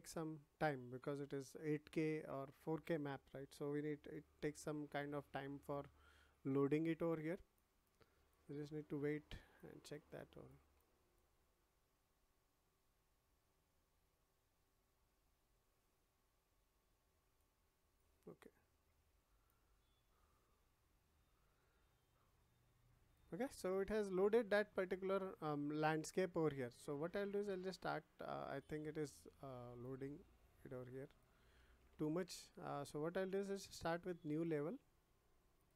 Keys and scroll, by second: 31.5 ctrl+z.